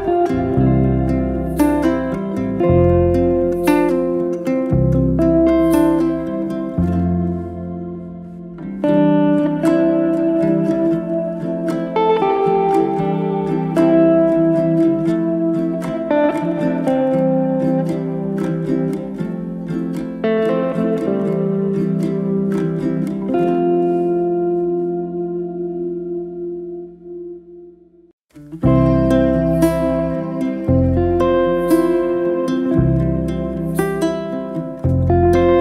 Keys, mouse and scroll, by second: 1.0 click, 1.2-2.7 middle drag, 3.2-3.8 right drag, 3.8 middle click, 4.2 ctrl+z, 4.5 ctrl+z, 4.8 middle drag, 5.0 click, 5.4 click, 5.6-6.1 right drag, 6.1-6.9 middle drag, 6.9 shift+click, 8.0 click, 8.3 click, 9.0 click, 9.6 click, 9.8 middle click, 10.2 drag, 10.4-11.6 middle drag, 11.6 scroll down 4, 11.8-13.4 middle drag, 13.4 click, 13.9 Tab, 14.1 click, 14.6 3, 14.7 click, 15.2 shift+s, 16.1 Tab, 16.4-16.8 middle drag, 16.8 shift+a, 21.2 scroll up 1, 21.5 s, 25.6 middle click, 26.2 Tab, 26.4 middle click, 26.8 f, 27.3-28.3 shift+middle drag, 28.3 e, 34.0-35.5 middle drag.